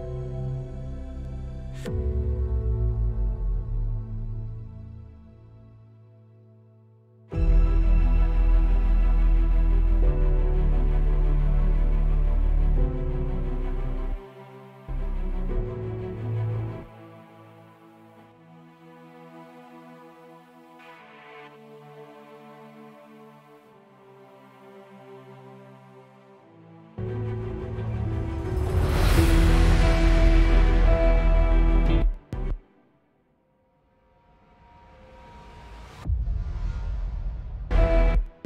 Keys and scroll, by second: 2.9 alt+6, 14.4 s, 15.1 s, 17.1 s, 27.2 s, 32.3 space, 32.4 space, 32.7 s, 37.9-38.4 typing.